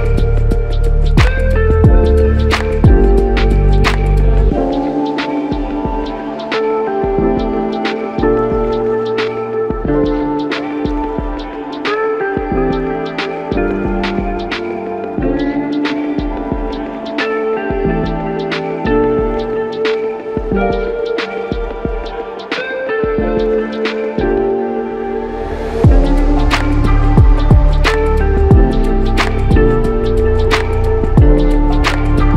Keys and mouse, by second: 10.2 alt+click, 11.5 ctrl+click, 19.3 double click, 23.9 ctrl+click, 27.4 shift+click, 28.3 shift+click.